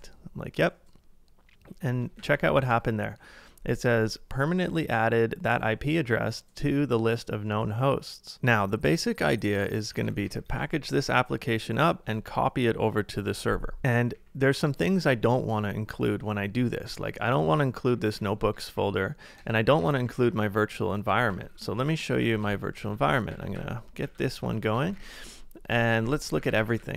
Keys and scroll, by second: 2.2 ctrl+a, 2.6 ctrl+u, 9.9 ctrl+a, 10.6 ctrl+a, 13.2 z, 13.8 ctrl+w, 14.1 k, 16.9-20.2 typing, 19.4 Return, 21.3 ctrl+a, 21.7 shift+5, 22.2 ctrl+a, 22.4 h, 22.9 ctrl+a, 23.3 ctrl+a, 23.6 ctrl+[, 24.0 ctrl+a, 24.9-26.9 typing.